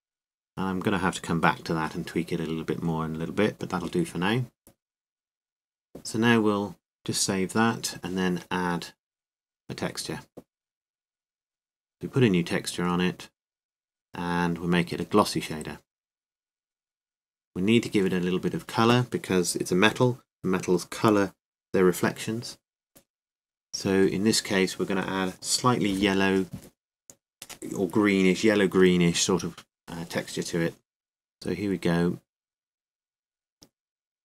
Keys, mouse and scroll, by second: 0.6 click, 0.6 g, 5.2-6.7 drag, 6.3 Tab, 8.4-9.6 drag, 9.8 click, 14.4-28.0 drag.